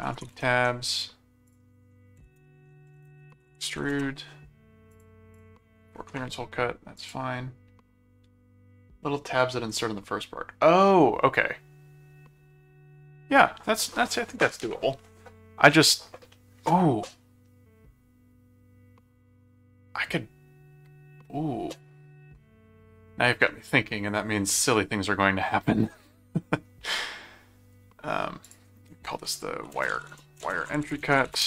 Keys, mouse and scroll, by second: 0.0-0.7 typing, 1.4 click, 2.3-4.3 typing, 4.9 click, 7.0 click, 28.4 click, 29.6-31.4 typing.